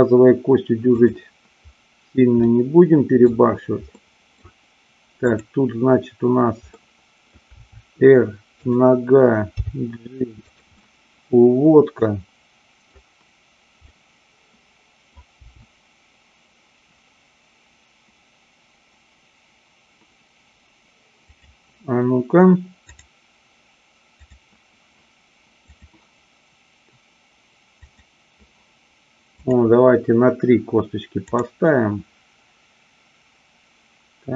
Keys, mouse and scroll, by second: 1.0 click, 2.4-3.3 middle drag, 3.9 middle click, 6.8-7.3 middle drag, 7.6 r, 9.5 g, 10.4 click, 10.6-12.9 middle drag, 13.8-15.0 middle drag, 15.4 g, 21.3 click, 24.0 click, 25.8-26.8 drag, 27.9 click, 29.3-30.3 drag, 31.3 click.